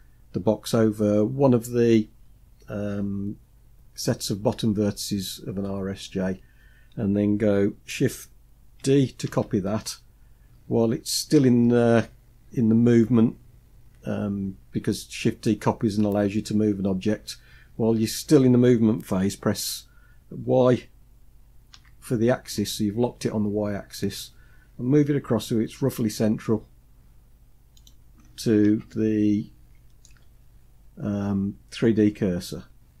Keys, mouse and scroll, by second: 9.0 shift+d, 27.8-28.5 scroll up 4, 28.5-29.7 shift+middle drag, 30.0 scroll up 2, 32.4-33.0 scroll up 3.